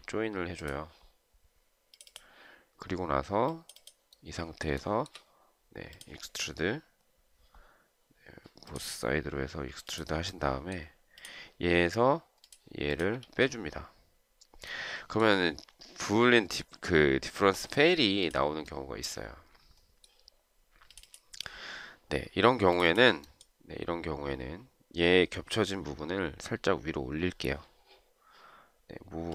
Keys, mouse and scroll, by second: 5.1 shift+right click, 13.6 space.